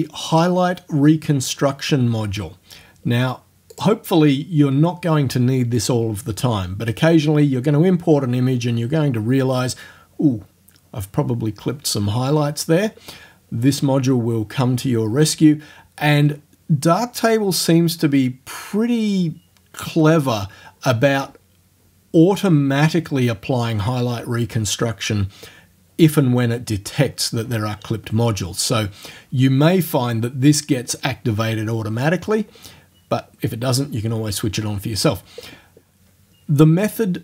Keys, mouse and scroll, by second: 3.8 click.